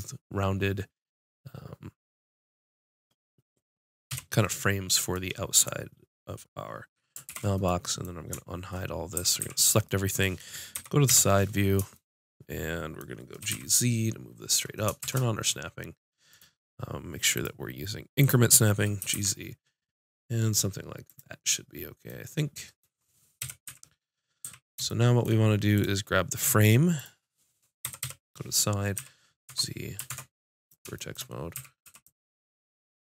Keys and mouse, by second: 4.1 KP_5, 7.3 alt+h, 9.2 a, 9.4 a, 10.8 KP_1, 11.1 KP_5, 13.4 g, 17.4-19.0 drag, 19.0 g, 21.2-23.4 drag, 23.4 KP_5, 23.7 z, 23.8 click, 24.4 z, 24.9-26.7 drag, 27.9 KP_1, 28.1 KP_5, 29.0 z, 29.5 Tab, 30.1 ctrl+Tab, 31.6 a, 31.9 b, 32.1 click.